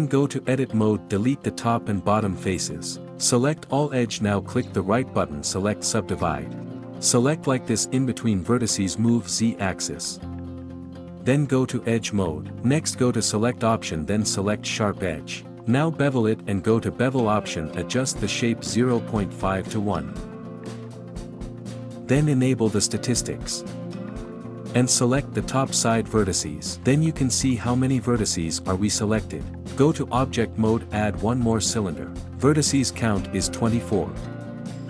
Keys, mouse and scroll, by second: 0.8 x, 1.1 click, 2.3 x, 3.2 ctrl+middle click, 3.4 a, 4.6 right click, 4.9 middle click, 5.2 click, 6.0 2, 6.1 click, 6.3 alt+shift+click, 6.9 x, 7.6 shift+click, 8.0 shift+click, 8.4 shift+click, 8.8 shift+click, 9.3 shift+click, 9.5 middle click, 10.3 g, 13.4-15.4 middle drag, 15.6 ctrl+middle click, 15.8 ctrl+b, 18.4-20.8 drag, 21.3 click, 21.8 Tab, 22.0-24.9 drag, 24.9 Tab, 29.5 Tab, 29.6 shift+a, 31.0-33.7 drag, 34.0 click, 34.3 ctrl+shift+middle click, 34.7 Tab.